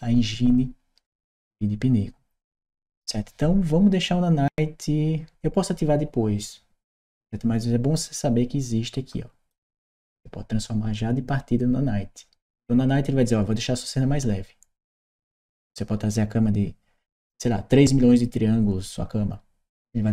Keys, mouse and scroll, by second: 8.9 click.